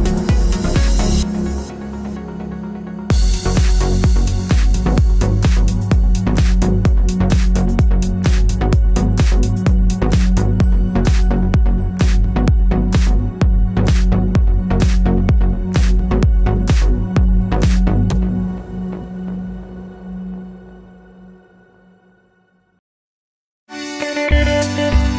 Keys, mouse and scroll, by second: 4.2 KP_Enter, 4.2 click, 21.1-25.1 drag.